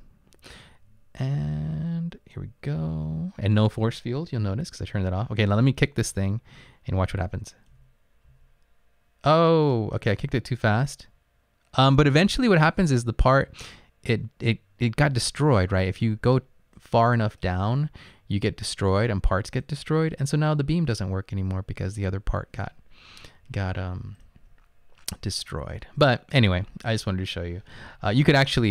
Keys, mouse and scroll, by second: 2.3 right click, 4.6 Up, 4.7-5.6 scroll up 7, 5.8 Up, 6.1 Up, 6.4 Left, 6.5 Left, 7.3 Up, 8.3 Up, 16.9 right click, 19.6-21.6 right drag.